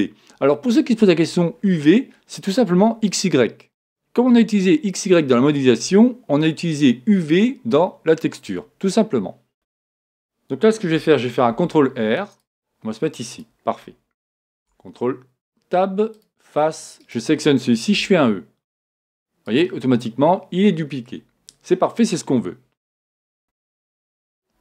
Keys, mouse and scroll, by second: 9.5 z, 11.5 ctrl+r, 12.3 ctrl+r, 13.4-15.2 drag, 14.5 ctrl+Tab, 17.0-18.9 right drag, 18.0 e, 20.1-22.0 middle drag, 23.4 Tab, 23.5 Tab.